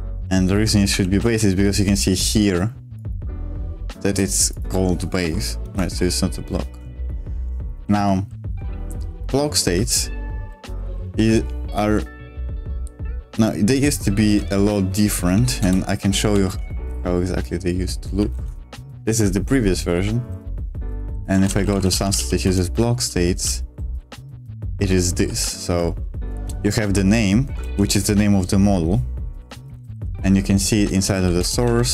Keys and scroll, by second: 0.0-1.7 typing, 5.6 ctrl+o, 6.4-8.6 typing, 9.7-10.4 j, 10.6 k, 10.8 k, 11.0 k, 15.2 super+3, 15.5 super+Return, 16.3 super+m, 16.8 g, 18.2-27.6 typing, 18.3 Return, 29.4 Escape, 29.4-31.6 typing, 31.3 Return.